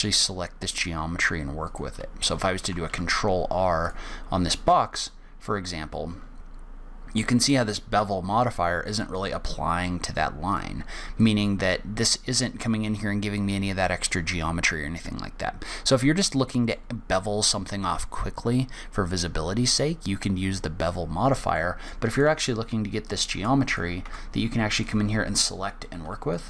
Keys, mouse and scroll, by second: 2.0 click, 3.2 ctrl+r, 10.8 right click, 11.5 click, 15.7-16.4 scroll down 1, 16.4 middle click, 21.9 middle click, 22.4 click, 23.4 click, 23.7 Tab, 24.0 click, 24.4 Tab, 25.1 click.